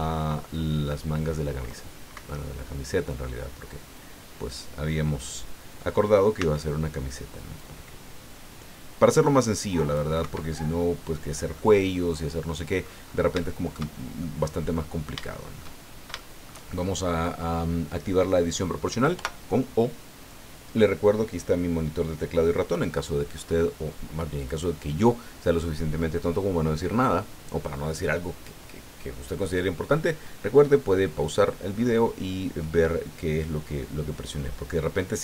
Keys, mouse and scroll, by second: 0.5-1.9 drag, 2.1 Escape, 2.4-5.9 middle drag, 6.3 c, 7.5-10.1 drag, 10.2 Escape, 10.5-11.7 drag, 11.9 scroll down 1, 12.2 click, 13.4 shift+click, 14.0 shift+scroll down 1, 14.2 shift+click, 15.2 shift+middle click, 16.1 shift+click, 19.1 o.